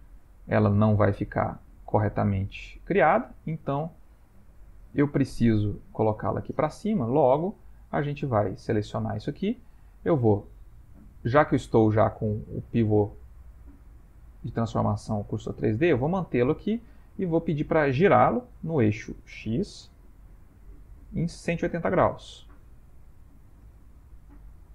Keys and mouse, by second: 0.0-2.2 shift+middle click, 1.3 middle click, 1.5 middle click, 3.4 middle click, 3.9-4.3 shift+middle click, 5.5 middle click, 6.7 middle click, 6.9 middle click, 7.7 click, 8.3 middle click, 9.0 Tab, 9.0 middle click, 9.8 a, 10.5 middle click, 13.7 click, 16.5 middle click, 19.3 r.